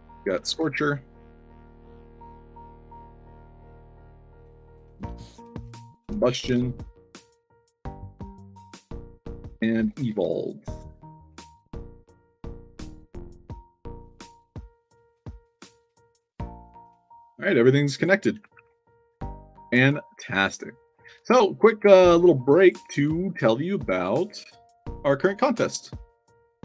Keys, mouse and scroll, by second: 0.0-1.0 typing, 1.9 drag, 3.2 drag, 4.2 click, 4.6 click, 5.5 click, 6.0 c, 6.3 o, 7.3 drag, 7.9 drag, 8.5 click, 9.3-10.4 typing, 10.9 drag, 11.5 click, 12.0 drag, 13.0-13.4 drag, 13.7 click, 14.0 middle click, 14.9 drag, 15.3 click, 15.7 click, 16.1 drag, 16.7 click, 17.4 drag, 17.8 click, 18.5 ctrl+s, 19.7 alt+Tab, 20.3 alt+click, 20.9 alt+Tab, 21.4 alt+click, 22.5 click, 22.8 alt+Tab, 23.7 alt+click, 24.8 click, 25.8 click, 26.0 click.